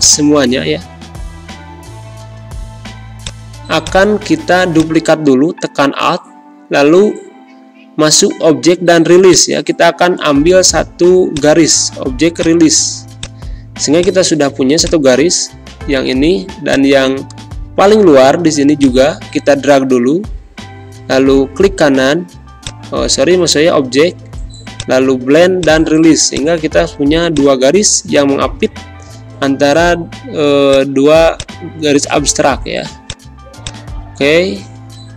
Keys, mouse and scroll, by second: 9.2-22.5 shift+drag, 28.5 shift+Down, 30.6-35.1 shift+drag.